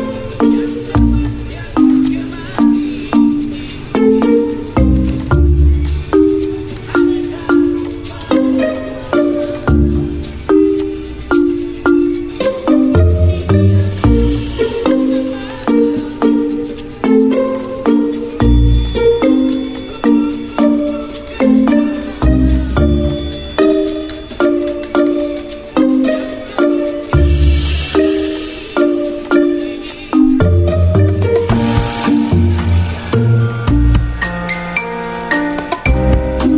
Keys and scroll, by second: 0.3 ctrl+g, 5.8 v, 10.0 Escape, 26.5 ctrl+z.